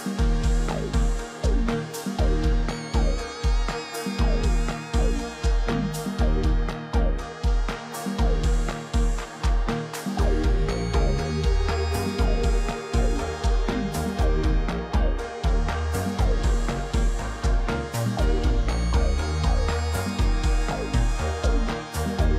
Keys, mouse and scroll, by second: 9.7 click, 10.7 click, 14.2 double click, 19.9 shift+click.